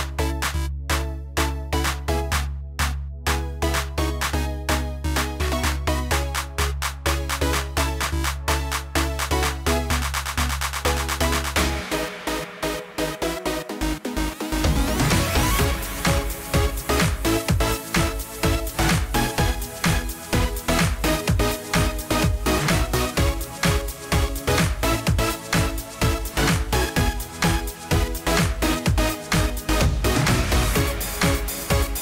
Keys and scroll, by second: 8.6 ctrl+g.